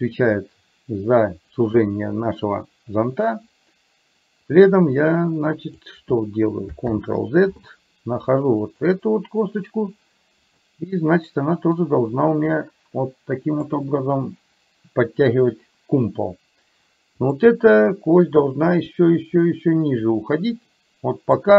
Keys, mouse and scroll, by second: 2.4 click, 4.7-5.9 drag, 7.0 ctrl+z, 8.8 click, 11.8-13.8 drag, 17.4 click, 18.5-21.4 drag.